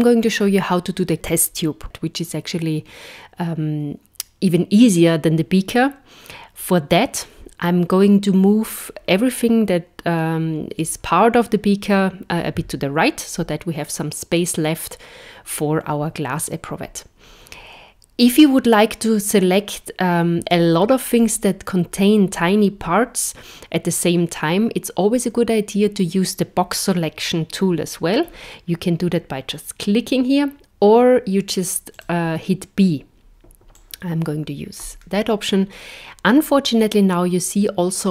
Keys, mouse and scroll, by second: 32.0 click, 33.8 click.